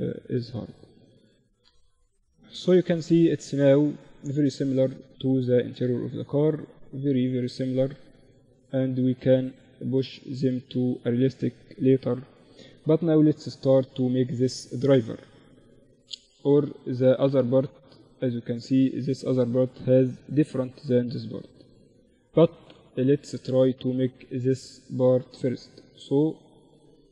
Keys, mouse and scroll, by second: 0.9 KP_1, 1.6 middle click, 1.7 z, 3.1-5.5 middle drag, 4.7 z, 5.7 middle click, 9.3-12.1 middle drag, 12.1 KP_1, 12.3 middle click, 12.7 z, 13.2-16.9 middle drag, 16.5 click, 20.3-27.1 middle drag.